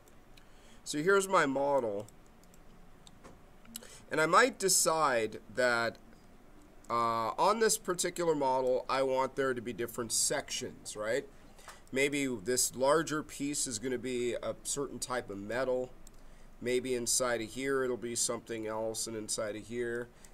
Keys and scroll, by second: 6.8 space.